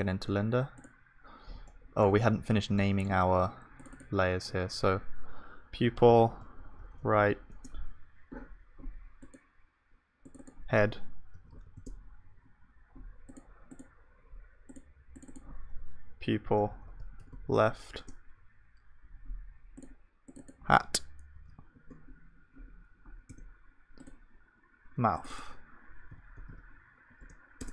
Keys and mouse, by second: 0.0-2.0 drag, 2.8-11.6 middle drag, 4.4-23.3 drag, 4.4-23.3 right drag, 16.7 p, 26.5-27.6 drag.